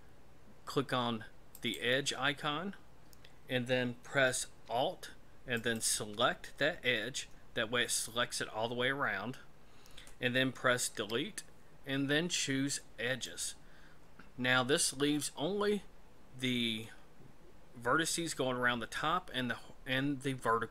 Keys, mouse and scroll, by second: 1.5 click, 5.5 alt+right click, 10.9 Delete.